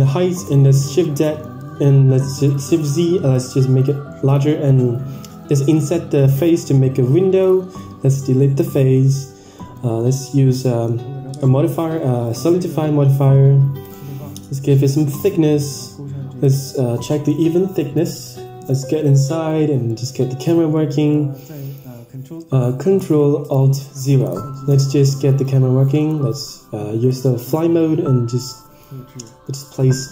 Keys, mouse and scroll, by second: 0.8 middle click, 1.5 KP_1, 1.9-2.5 scroll up 5, 2.4 click, 3.0 Tab, 3.7 click, 4.2 click, 5.1 i, 8.9 middle click, 9.5 shift+middle click, 9.9 Tab, 11.6 click, 12.2-13.8 drag, 14.8-15.8 drag, 16.3 click, 16.9 middle click, 17.4-17.9 scroll up 5, 17.7 shift+middle click, 18.0 middle click, 18.4 scroll up 1, 18.7 shift+middle click, 19.1 middle click, 19.8 middle click, 20.7 shift+middle click, 21.1 middle click, 21.5 n, 23.4 ctrl+alt+KP_0, 24.3 shift+`.